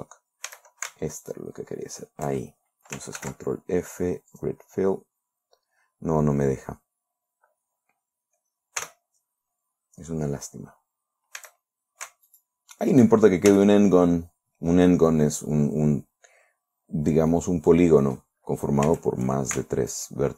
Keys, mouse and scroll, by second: 1.0 a, 1.7 alt+shift+right click, 3.6 ctrl+f, 4.8 click, 9.3 f, 11.8 a, 12.8 alt+shift+right click, 14.0 f, 17.8-18.8 drag, 19.3 a.